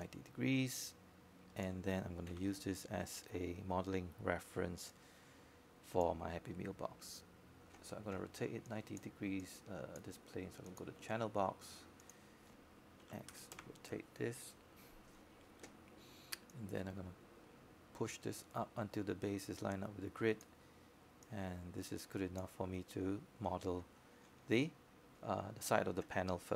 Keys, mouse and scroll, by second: 2.6 click, 4.9 w, 7.6-26.0 drag.